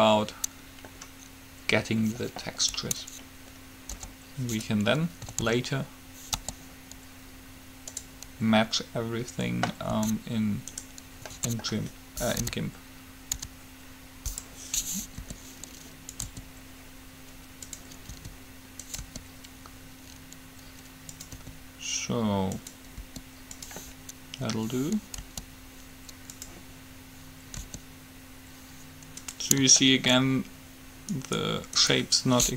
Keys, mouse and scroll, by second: 4.0 u, 5.6 a, 6.6 g, 10.1 s, 11.4 s, 15.4 r, 16.4 s, 18.3 s, 19.2 r, 21.6 s, 23.3 r, 25.4 g, 27.8 r, 30.1-31.6 middle drag, 31.4-32.5 right drag.